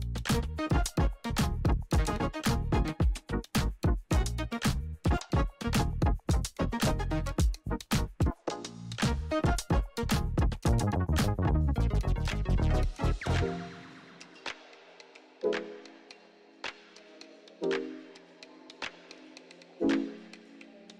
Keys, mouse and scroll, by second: 0.0 [, 2.9 0, 3.8 Right, 4.2-5.7 typing, 6.0 Return, 6.8 [, 8.7 1, 9.6 Right, 11.0-12.5 typing, 12.8 Return, 13.7 [, 15.9 2, 18.5 Right, 20.3 Right.